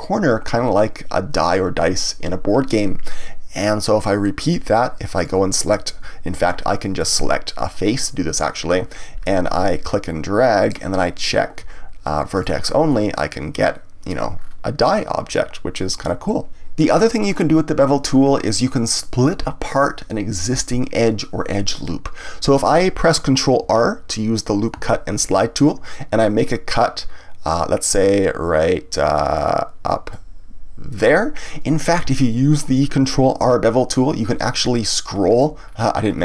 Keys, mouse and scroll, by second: 3.2-5.1 middle drag, 5.1 click, 7.0 click, 7.5 click, 9.8 click, 12.3 click, 12.9-14.4 middle drag, 14.4-14.8 scroll down 1, 14.8-16.6 middle drag, 19.0-22.0 middle drag, 24.7 ctrl+r, 31.0 click, 32.0 ctrl+z, 33.4 ctrl+r.